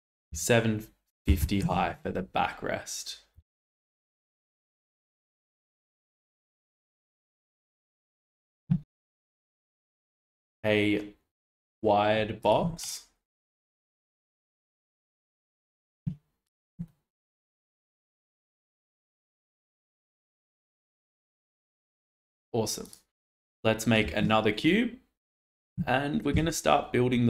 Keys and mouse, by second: 3.3 g, 8.0 shift+click, 9.4 click, 9.8-11.7 drag, 12.4 click, 12.8 click, 14.4-15.6 drag, 16.4 click, 16.8 shift+middle drag, 18.6 click, 24.0 shift+a, 26.3 s.